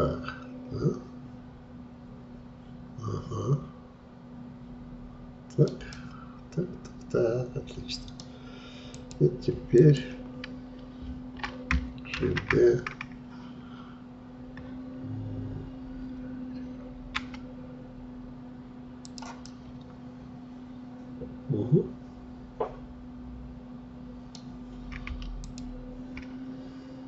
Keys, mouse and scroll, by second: 6.0-8.9 middle drag, 8.9-12.2 drag, 12.2 shift+d, 19.5-22.6 middle drag, 25.4-27.0 shift+drag.